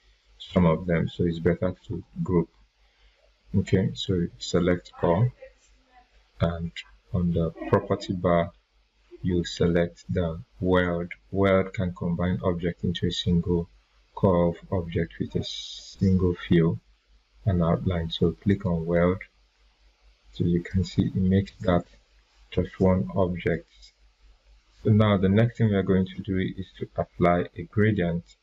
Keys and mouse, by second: 18.5 click, 21.8 ctrl+z.